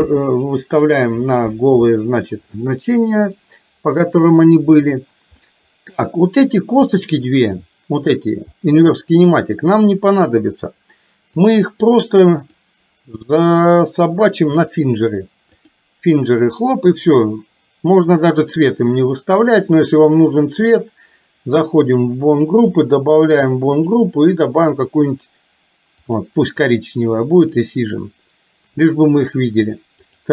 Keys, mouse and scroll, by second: 0.0 KP_1, 2.0 shift+middle click, 3.4 shift+middle click, 5.5-6.7 middle drag, 6.9 middle click, 7.8 click, 8.5 middle click, 12.5-14.8 drag, 15.5 click, 21.8 click, 23.9-26.3 drag, 27.5 click, 30.0 click.